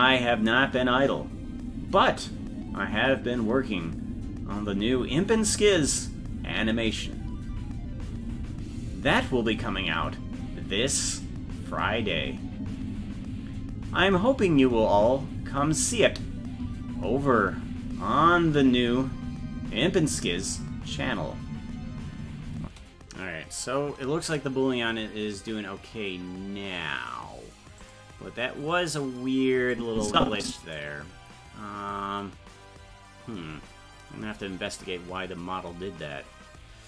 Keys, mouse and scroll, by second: 22.6 space, 24.6 ctrl+s, 27.8 click, 29.7-30.7 drag.